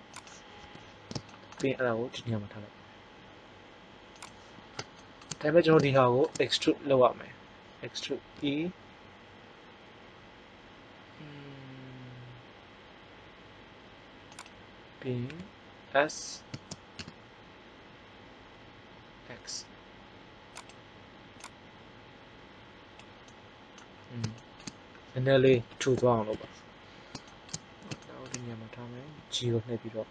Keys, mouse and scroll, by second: 0.5 KP_1, 2.1 g, 4.7-6.0 middle drag, 8.3 e, 14.4 click, 15.2 s, 16.8-18.0 middle drag, 21.3-22.6 drag, 25.6 ctrl+l, 26.3 KP_1, 29.0 g.